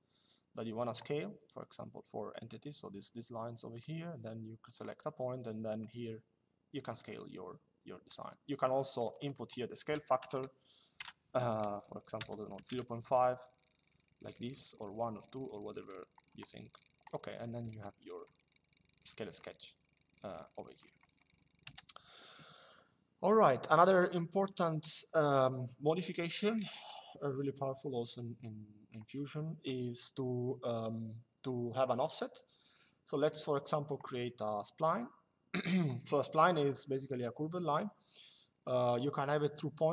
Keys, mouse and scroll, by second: 3.4 click, 4.5 click, 8.7 click, 9.9 KP_0, 11.9 KP_0, 12.4 KP_5, 15.5 click, 19.1 click, 21.4 Delete, 24.2 click.